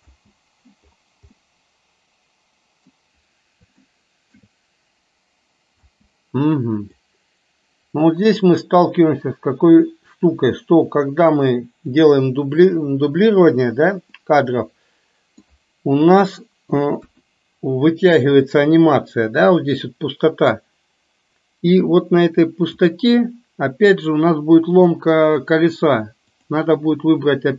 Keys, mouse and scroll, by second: 0.2 space, 1.5-2.9 middle drag, 3.9-4.5 shift+middle drag, 5.9 space, 7.0-12.1 drag, 14.3-15.7 middle drag, 16.0 KP_3, 17.0 KP_1, 20.7-22.9 drag, 24.9 click, 26.3 click.